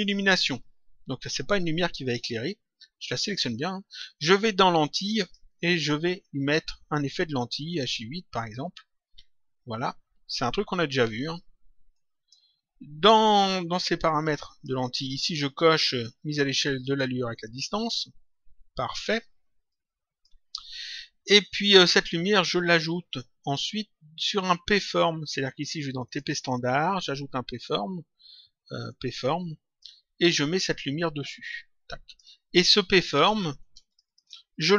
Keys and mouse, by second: 3.1 click, 5.1 click, 6.5 click, 8.4 click, 11.9 click, 14.0 click, 17.3 click, 19.6 click, 22.4 click, 25.9 click, 28.8 click, 30.9 click, 33.8 ctrl+click.